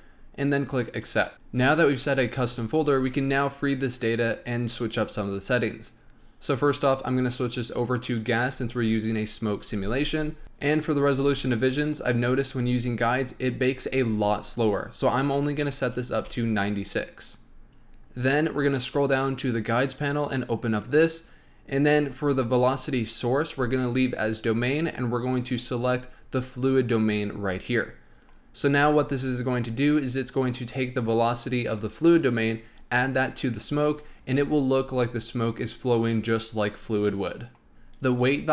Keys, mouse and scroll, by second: 2.7-4.0 scroll up 6, 4.0 click, 6.7-9.7 drag, 10.4 click, 17.7-19.9 scroll down 8, 19.9 click, 20.8 click, 21.3-24.3 scroll down 3, 25.3-28.3 drag.